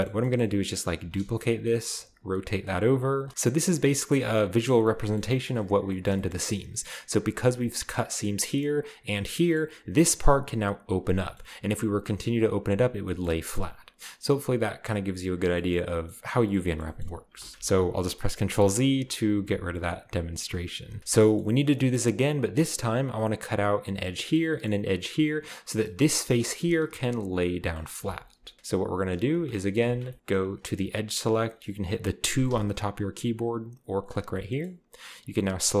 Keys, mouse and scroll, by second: 0.1 middle click, 1.0-3.8 typing, 1.5-3.3 shift+drag, 4.8-5.8 scroll up 1, 5.6 Tab, 5.7 typing, 6.5 shift+middle click, 6.5-7.8 shift+scroll up 1, 9.3-10.0 scroll down 1, 10.0 right click, 10.9 right click, 13.3 shift+middle click, 13.4-14.4 shift+scroll up 1, 15.7-16.7 middle drag, 15.7-16.7 scroll up 1, 17.1 ctrl+middle click, 17.1-17.5 scroll up 1, 17.4 ctrl+z, 17.5 ctrl+z, 18.8-21.0 ctrl+z, 21.0-23.0 shift+middle drag, 21.0-23.0 scroll up 1, 21.0 a, 25.3-25.8 scroll down 1, 25.7 right click, 26.4-27.1 typing, 26.5 shift+middle click, 26.6 shift+click, 28.1 ctrl+z, 28.2 ctrl+z, 29.3 z, 29.9 ctrl+z, 30.1-30.7 shift+middle drag, 32.5 2, 34.0 click, 34.4-35.8 shift+middle drag, 34.7-35.8 shift+scroll up 2.